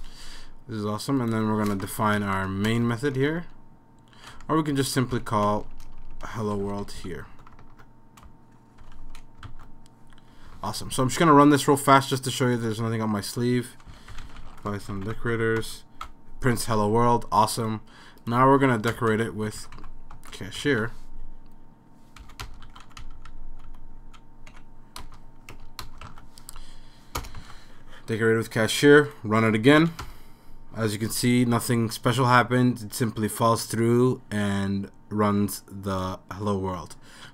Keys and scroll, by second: 1.7 \, 1.8 Return, 2.2 BackSpace, 2.7 Return, 3.2 BackSpace, 4.4 Down, 4.9 Down, 5.1 End, 5.5-7.5 typing, 8.6-9.5 typing, 10.6 super+s, 13.7-15.4 typing, 15.6 Return, 17.6 typing, 18.8-20.3 typing, 20.7 super+s, 22.7 super+s, 23.3 Down, 23.4 Down, 23.5 Down, 23.7 Down, 23.9 Down, 24.0 Down, 24.5 End, 25.2 Return, 25.5 BackSpace, 25.8 Return, 26.1 super+s, 27.2 BackSpace, 27.4 super+s, 29.4 super+s, 29.8 Up, 30.0 Return.